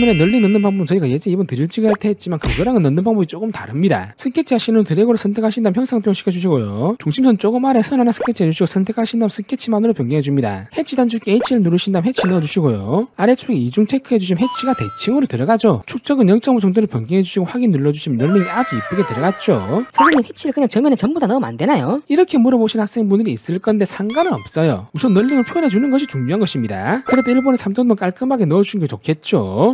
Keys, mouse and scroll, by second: 0.3 click, 0.6 s, 1.1 click, 1.9 click, 3.0 click, 3.4 click, 4.7 1, 5.4 click, 6.5 click, 7.1 click, 8.3 click, 9.7 click, 10.3 click, 12.2 click, 13.3 click, 14.1 click, 15.7 5, 17.7 click, 20.1 right click, 21.0 click, 21.6 click.